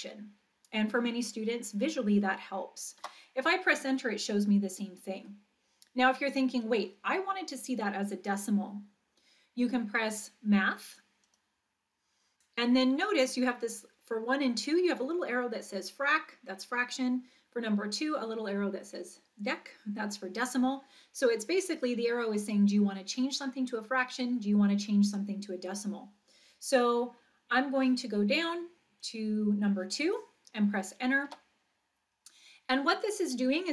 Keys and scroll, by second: 3.0 Return, 29.0 Down, 31.3 Return.